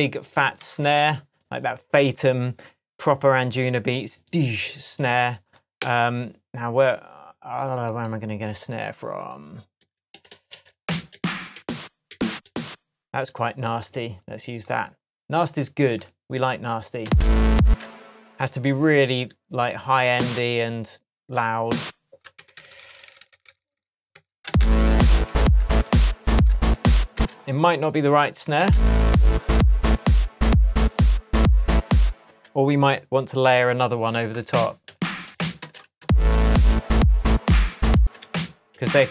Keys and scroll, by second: 0.6 super+d, 0.9 shift+super+Tab, 5.7 Right, 9.7 Right, 17.0 space, 22.3 super+d, 22.9 super+d, 24.1 super+d, 24.4 super+space, 24.8 super+d, 26.6 shift+super+d, 26.7 shift+super+Tab, 27.1 shift+space, 27.9 space, 28.5 space, 32.2 space, 34.8 Down, 37.9 space.